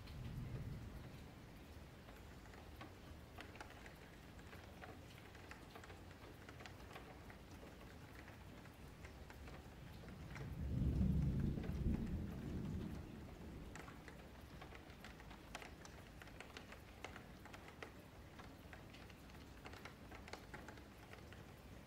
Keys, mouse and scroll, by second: 0.1 click, 1.3 ctrl+a, 3.8-6.8 drag, 7.0-9.3 shift+drag, 9.3 middle click, 9.5 Tab, 9.9 2, 10.5 alt+click, 10.9 middle click, 11.5 shift+click, 13.4 ctrl+v, 14.2 ctrl+b, 17.1 middle click, 17.6 Tab, 18.1 click, 18.6 click, 20.0 click, 20.2 Tab, 20.5 3, 21.1 middle click, 21.5 3, 21.7 click.